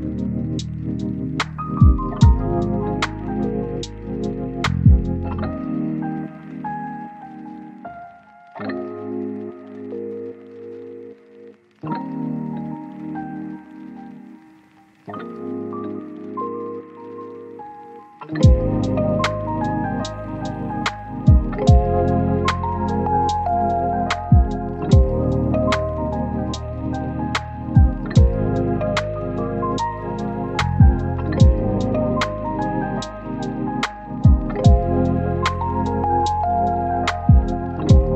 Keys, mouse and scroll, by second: 0.2 click, 2.0-4.7 right drag, 4.8 scroll down 1, 4.9 scroll up 1, 5.0-6.4 right drag, 6.4 scroll up 1, 6.7-7.7 drag, 7.7 scroll down 1, 7.9 click, 8.1 right click, 8.5-9.0 scroll up 2, 8.6 right click, 9.0 right click, 9.8 click, 11.4 right click, 12.1 scroll up 1, 12.2 right click, 18.2 click, 19.2 scroll down 1, 19.3 right click, 20.5 scroll down 1, 20.6 scroll up 1, 20.7 right click, 21.1 scroll down 1, 21.2-22.1 scroll up 1, 22.1 click, 22.3 scroll down 1, 22.6 scroll up 1, 23.8 click, 24.0 right click, 24.3-25.9 scroll up 1, 25.9 right click, 26.7 scroll down 1, 26.9-27.9 scroll up 1, 28.7 click, 28.7 scroll down 1, 28.9-29.3 scroll up 1, 29.4 click, 29.7 scroll up 1, 31.3 click, 31.6 scroll down 1, 31.7-33.0 scroll up 1, 33.3 right click, 33.6-34.4 scroll up 1, 34.4-34.8 scroll down 1, 34.8-35.8 scroll up 1, 35.8 click, 36.0 right click, 36.4 scroll up 1, 36.5 right click, 37.5 click, 37.7 scroll down 1, 37.8-38.1 scroll up 2, 38.0 right click.